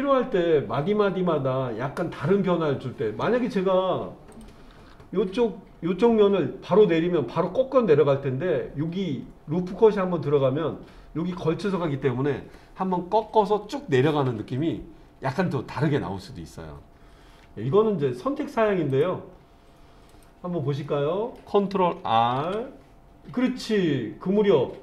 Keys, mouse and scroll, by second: 4.3 click, 5.1 click, 18.9 click, 19.4-20.1 scroll up 1, 20.1 click, 20.8 middle click, 22.4 ctrl+r.